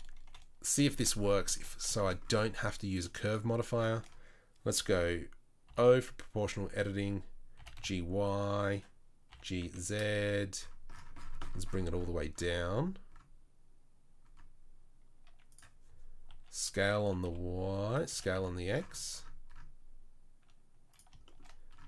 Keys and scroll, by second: 0.3 KP_1, 1.5 1, 5.7 o, 7.6 g, 9.3 g, 16.3 s, 18.1 s.